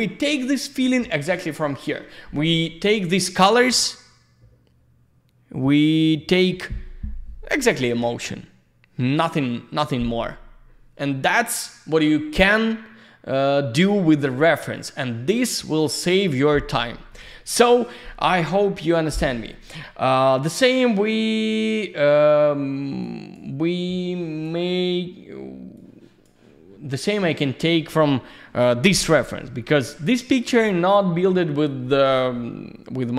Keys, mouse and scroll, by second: 17.7 click, 22.5 click, 23.0 click, 23.8 click, 25.7 click, 27.3 click.